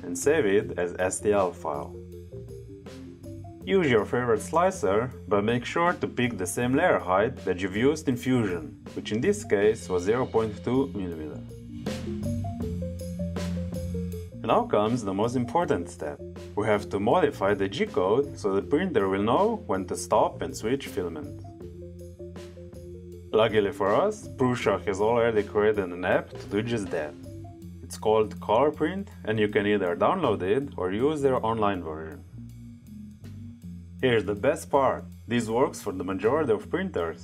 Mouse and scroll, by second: 0.1 click, 2.6 click, 4.2 click, 4.4 click, 6.5-7.4 drag, 9.1 click, 11.1 click, 12.1 click, 14.0 click, 16.4 click.